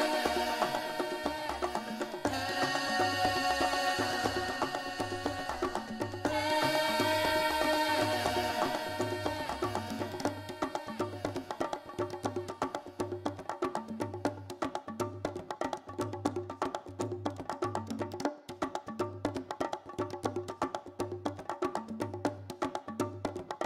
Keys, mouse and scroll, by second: 1.3 middle click, 2.0 KP_7, 2.5 shift+middle click, 2.8 middle click, 3.5 g, 4.8 g, 6.0 click, 6.1 middle click, 8.5 ctrl+z, 9.3 click, 10.0 KP_7, 10.6 g, 14.1 click, 14.5 shift+middle click, 14.8-16.0 scroll down 2, 16.0 middle click, 16.6 middle click, 16.8 scroll up 4, 17.0 middle click, 17.8 middle click, 19.8 Tab, 20.7 click, 21.3 scroll down 4, 21.6 shift+middle click, 22.0 Tab, 22.1 middle click.